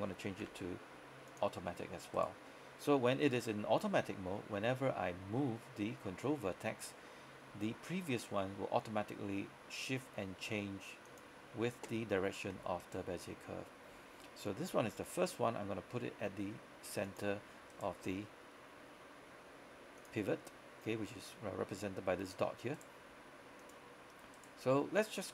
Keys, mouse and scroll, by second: 0.5 v, 1.4 click, 2.2 right click, 3.7 g, 11.2 click, 12.1 scroll down 1, 12.3-12.9 scroll up 1, 12.9 right click, 14.8 g, 17.1 click, 17.8 right click, 18.1 g, 19.9 typing, 20.1 click, 21.1-21.6 scroll up 1, 21.6-22.8 scroll down 1, 22.8 right click, 23.1 typing, 23.7 click, 24.4 right click, 24.7 typing.